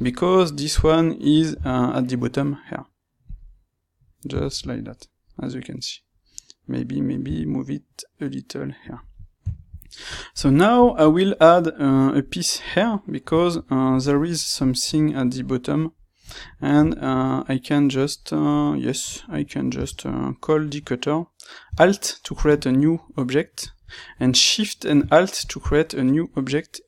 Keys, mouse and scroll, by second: 1.5 g, 3.2 click, 3.4-26.8 middle drag, 7.2 g, 8.8 click.